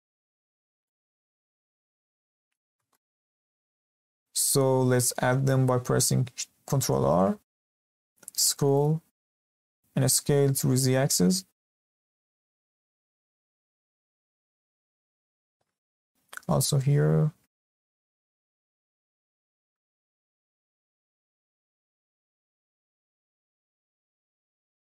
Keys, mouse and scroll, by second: 0.6 scroll up 1, 0.8 shift+middle click, 1.5 Escape, 2.0 Tab, 2.4-2.9 scroll up 1, 2.9-5.9 shift+middle drag, 6.8 ctrl+r, 9.0-9.8 scroll up 2, 9.8-10.2 scroll down 1, 10.2 s, 14.8-15.1 scroll up 1, 15.1-15.8 shift+middle drag, 15.8 ctrl+r, 20.1 ctrl+r, 22.2 s.